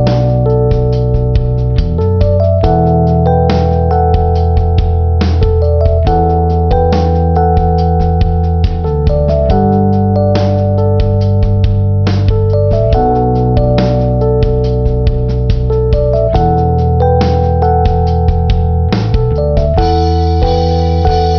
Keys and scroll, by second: 14.0 ctrl+-, 16.7 ctrl+=.